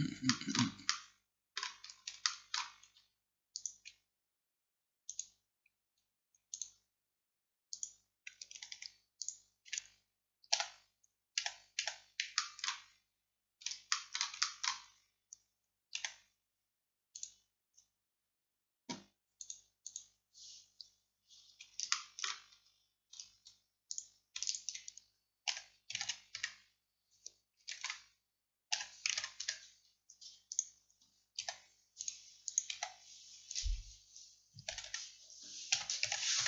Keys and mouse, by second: 3.2 click, 3.6-8.5 middle drag, 8.5-11.4 drag, 10.6 f, 11.4 a, 11.9 a, 12.4 click, 13.0 click, 13.8 click, 16.0 a, 17.2-19.2 drag, 19.2 middle click, 19.5-21.5 drag, 25.5 r, 27.8 ctrl+z, 28.8 r, 32.8 g, 34.8 a, 34.9 a, 35.8 r.